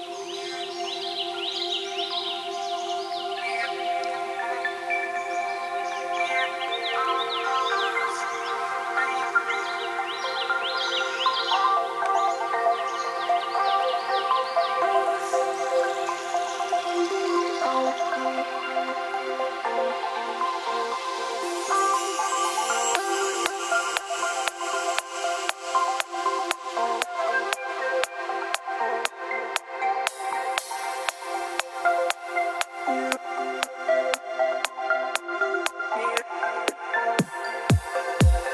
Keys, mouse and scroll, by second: 0.5 click, 0.8-1.5 scroll down 7, 2.2 scroll down 2, 5.9 F3, 6.7 scroll down 3, 6.8 scroll up 1, 7.4 o, 8.1 click, 9.5 click, 12.0 click, 14.4 click, 15.2 click, 17.1 click, 18.9 middle click, 19.0 middle click, 20.4-21.1 scroll down 5, 20.9 3, 22.4 F3, 23.9 click, 24.5 click, 24.7 x, 25.0 scroll up 1, 25.2-25.8 scroll down 2, 25.9 click, 26.3 click, 27.3 click, 27.5 scroll up 1, 27.5-28.4 scroll down 7, 28.6 click, 29.1 click, 30.0 m, 32.9 click, 33.2 middle click, 33.2 middle click, 34.3 click, 34.5 click, 34.8 click, 35.2 r, 36.3 click, 37.6 p.